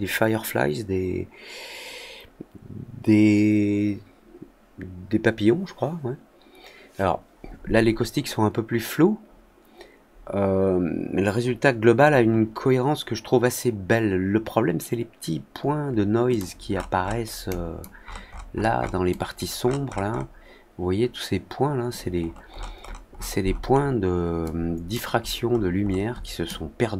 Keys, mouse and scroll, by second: 16.2 click, 16.6 middle click, 16.9 scroll down 1, 17.4 click, 17.9-18.4 scroll up 2, 19.0 drag, 19.5-20.2 scroll up 4, 22.1-23.9 scroll down 12, 24.4-24.8 drag, 25.1-26.2 scroll down 4, 26.4-26.9 drag.